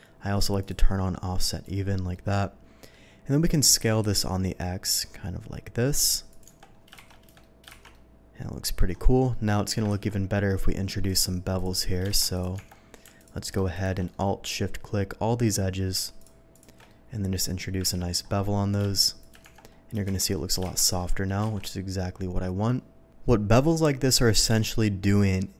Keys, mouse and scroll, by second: 0.6 shift+click, 1.4 shift+click, 2.1 shift+middle click, 3.8 s, 4.0 x, 4.2 s, 6.3 click, 6.5 Tab, 7.1 shift+2, 7.4 shift+middle drag, 7.7 shift+2, 7.9-8.8 middle drag, 9.3 middle click, 9.9 ctrl+z, 11.0 click, 11.5 click, 12.1 shift+2, 12.3 click, 12.5 Tab, 13.2 alt+click, 13.7 click, 14.1-15.4 middle drag, 15.5 scroll up 1, 16.2 alt+shift+click, 16.5 alt+shift+click, 16.9 alt+shift+middle click, 17.7 ctrl+scroll down 1, 17.8 ctrl+b, 18.2-18.8 ctrl+scroll up 1, 19.2 shift+click, 19.4 Tab, 19.7 middle drag, 20.1 shift+2, 20.3 middle drag, 21.0 middle drag, 21.6 alt+a, 21.6-22.6 middle drag, 23.4 click, 23.8 middle drag, 24.3-25.2 scroll up 1, 25.2 middle click.